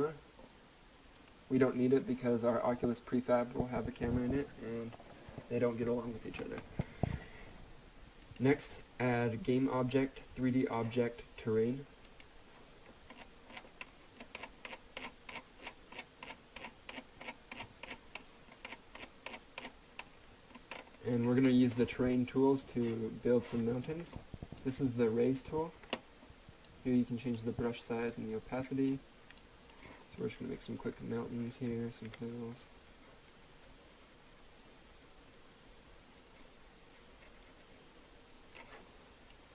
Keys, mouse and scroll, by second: 1.2 click, 8.2 click, 12.0 click, 13.1-13.9 scroll down 1, 13.9 middle click, 14.2-14.5 scroll down 1, 18.2 middle click, 18.5-20.0 scroll down 1, 20.0 middle click, 20.7-22.0 scroll up 1, 24.5 click, 27.0-27.6 drag.